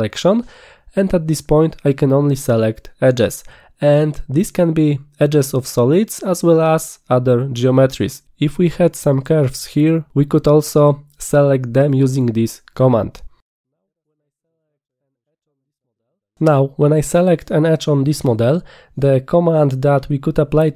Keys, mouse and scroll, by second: 0.3 click, 15.5 click.